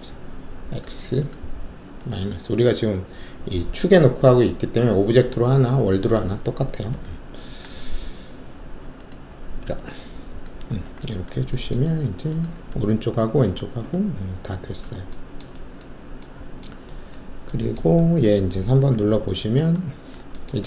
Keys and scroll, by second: 10.6 alt+w, 18.9 alt+3.